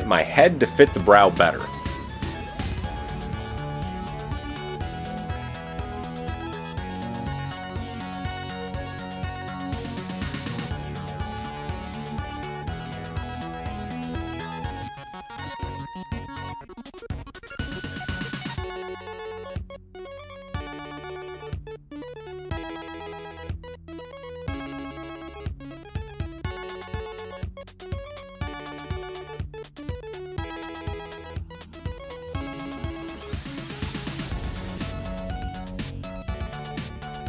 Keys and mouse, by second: 1.1 click, 1.2 shift+middle click, 1.7 shift+click, 1.8-3.1 shift+middle drag, 6.3 click, 8.1 s, 13.1 alt+click, 15.2 KP_1, 15.7 shift+click, 22.4 shift+click, 23.6 s, 28.9 middle click, 29.0 click, 30.3 click, 32.5 g.